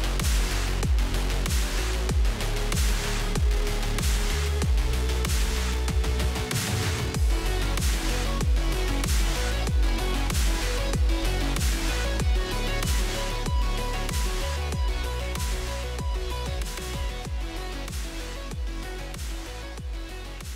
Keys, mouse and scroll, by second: 0.8 drag, 1.3-2.7 drag, 3.1-4.1 drag, 4.1 scroll up 3, 4.9 n, 5.0 click, 5.5 click, 7.1-8.6 drag, 9.2 click, 10.6 click, 11.1 click.